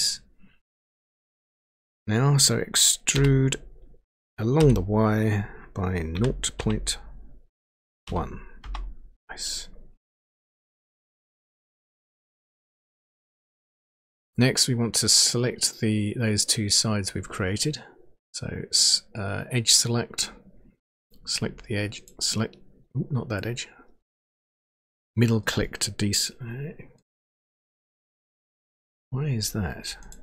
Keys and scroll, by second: 3.2 e, 4.5 y, 6.1 0, 6.5 ., 8.0 1, 8.6 Return.